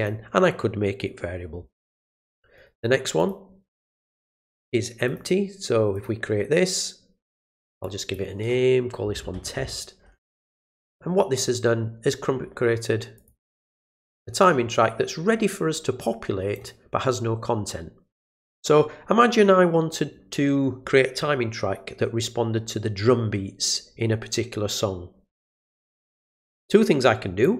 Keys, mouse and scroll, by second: 2.5 right click, 3.2 click, 4.4 click, 5.0 click, 5.9 click, 7.8 click, 13.1 click, 14.4-16.5 drag, 26.6 click.